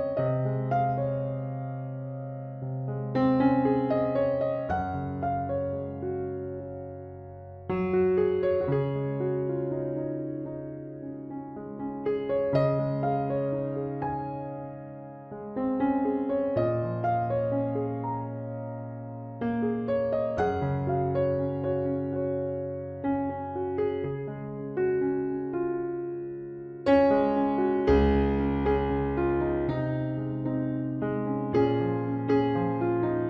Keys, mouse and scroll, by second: 0.4 c, 2.9-4.8 drag, 6.7 c, 9.0-10.8 drag, 10.3 c, 13.2-15.1 drag, 14.7 c, 16.7-18.9 drag, 17.6-18.7 right drag, 18.8 KP_3, 19.1 Tab, 20.2 ctrl+s, 20.8 z, 23.2 Tab, 24.0 right click, 24.6 ctrl+r, 27.2 ctrl+Tab, 28.2-29.9 drag, 28.5 c, 30.7-32.1 drag, 31.1 KP_Decimal, 32.1 middle click, 32.1 z, 33.0 i.